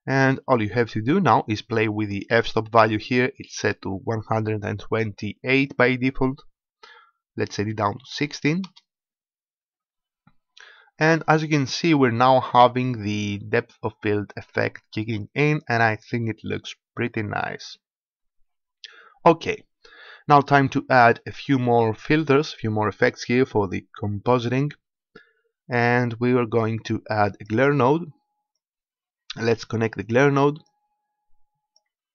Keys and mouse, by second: 12.8-14.6 drag, 21.4-23.1 drag, 22.9 shift+a, 28.5-30.4 drag, 30.6-32.1 drag.